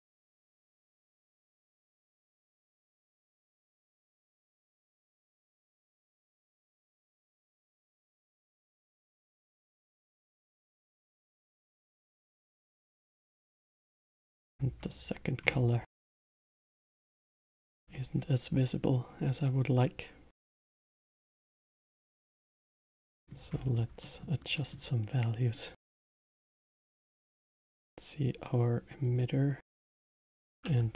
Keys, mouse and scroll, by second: 5.0 space, 5.5-5.9 middle drag, 5.9-6.5 scroll down 2, 6.5-7.1 middle drag, 7.1 scroll up 4, 7.9-8.4 scroll up 2, 8.4-9.0 middle drag, 9.0 scroll down 1, 9.5-10.3 middle drag, 10.3 scroll down 2, 10.9-13.1 middle drag, 13.1-15.4 drag, 15.4-15.9 scroll up 5, 15.9-16.8 middle drag, 16.8 scroll down 2, 17.3-20.3 middle drag, 20.6-23.1 drag, 23.1 middle click, 23.5 scroll down 3, 24.0-27.5 middle drag, 27.5 click, 29.0 click, 29.9 Tab.